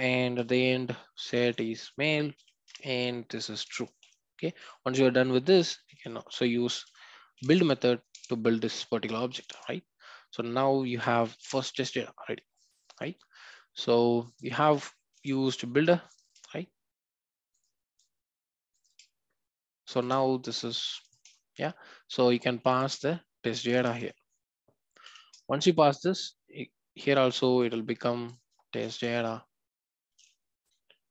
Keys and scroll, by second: 2.7 Return, 8.1 Return, 9.3 alt+Return, 11.5 Return, 25.3 Return.